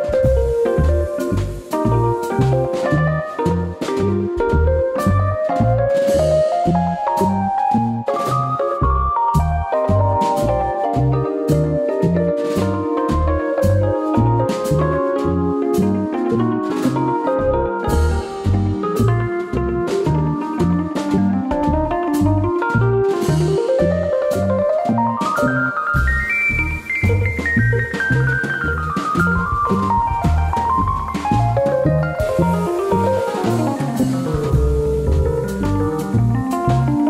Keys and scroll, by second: 0.1 super+d, 3.2 alt+BackSpace, 3.3 super+d, 10.8 super+-, 11.1 super+=, 14.7 super+z, 20.3 super+d, 21.2 super+z, 30.1 super+z, 31.5 super+-, 31.6 super+=, 33.2 super+d, 33.9 super+d, 34.8 super+d.